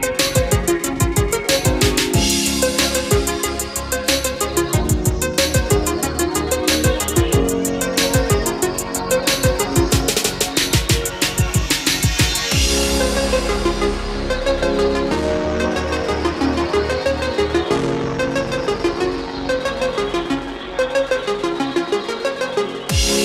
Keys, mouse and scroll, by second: 6.0 middle click, 7.0 scroll up 1, 9.0 click, 9.2-9.5 scroll down 1, 10.9 ctrl+click, 22.5 F8, 22.6 click, 23.1 middle click.